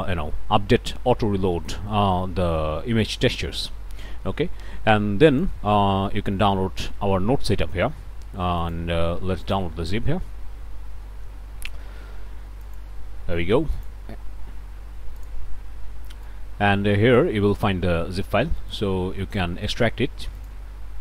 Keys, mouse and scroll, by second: 8.6 click, 9.5 click, 12.6 click, 13.8 click, 15.2 click, 16.3-17.4 drag, 18.6 right click, 20.4 click.